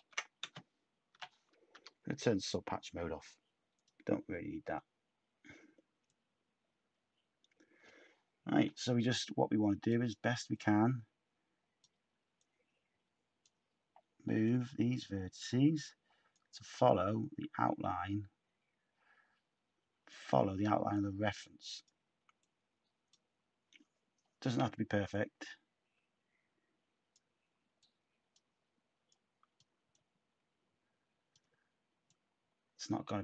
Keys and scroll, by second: 1.1-1.7 typing.